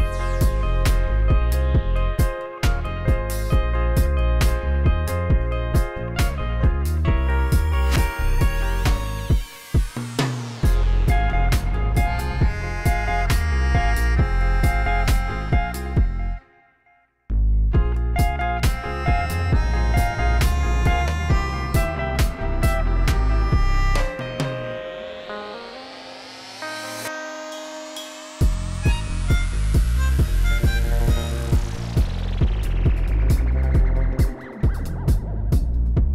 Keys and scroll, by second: 2.8 ctrl+t, 4.2 g, 11.3 g, 11.4 x, 12.2 shift+d, 12.3 x, 14.3-18.1 typing, 19.5 g, 19.6 x, 20.8 z, 21.1 g, 21.4 x, 35.0 r, 35.1 y.